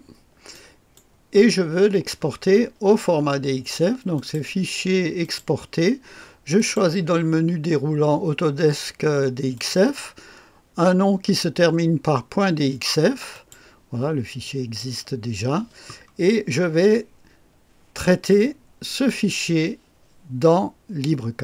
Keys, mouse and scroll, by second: 0.5 right click, 1.3-4.1 scroll up 2, 4.1 click, 5.2 click, 6.5 click, 9.5 click, 13.3 click, 14.4 click.